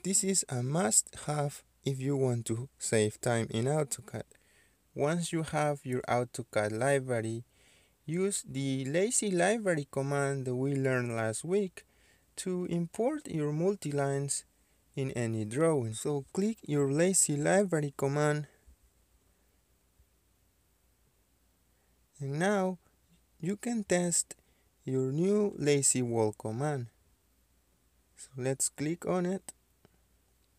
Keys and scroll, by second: 18.8 Escape, 19.0 Escape.